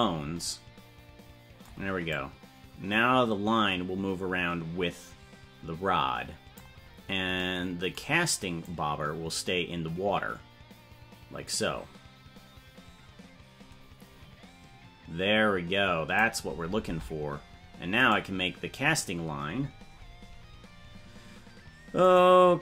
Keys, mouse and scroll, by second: 2.1-6.6 drag, 6.9-7.5 scroll down 4, 8.6-16.2 drag, 17.0 ctrl+Tab, 18.0-22.6 right drag.